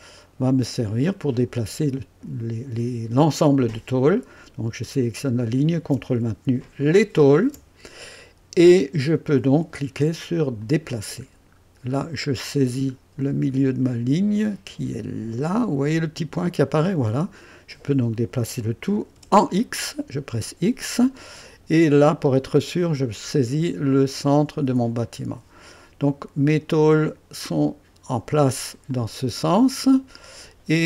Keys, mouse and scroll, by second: 0.2 right click, 6.8 ctrl+click, 10.6 click, 11.5 scroll up 2, 12.6 scroll down 2, 16.6 click, 19.1 x, 21.7 right click, 25.0 click, 26.9 click, 28.9 click, 29.9 right click.